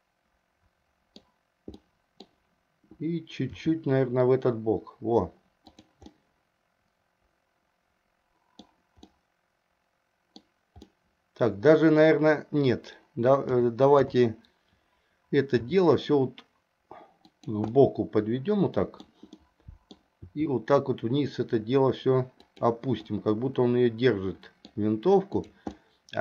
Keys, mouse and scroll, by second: 1.9 middle click, 3.7 r, 6.2-8.9 middle drag, 9.2-10.6 middle drag, 10.9-12.2 middle drag, 13.6 KP_5, 15.7 r, 17.8-19.2 middle drag, 19.4 middle click, 20.4 r, 23.2-24.9 middle drag, 25.5 click, 25.9-26.2 middle drag.